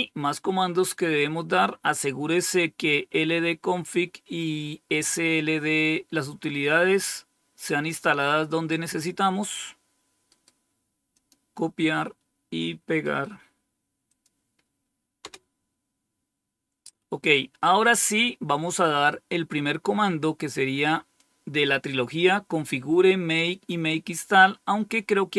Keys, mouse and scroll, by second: 7.5-9.4 drag, 10.2 right click, 11.0 click, 14.0 click, 15.1 Return, 17.6-18.5 scroll down 1, 18.5-20.2 scroll down 1, 24.8-25.3 scroll down 1.